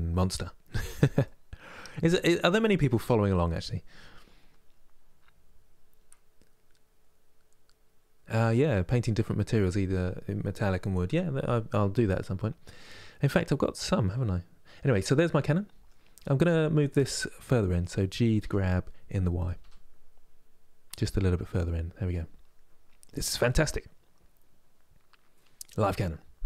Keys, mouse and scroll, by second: 0.9-14.9 middle drag, 16.6-18.1 drag, 18.1 g, 21.2-26.4 middle drag.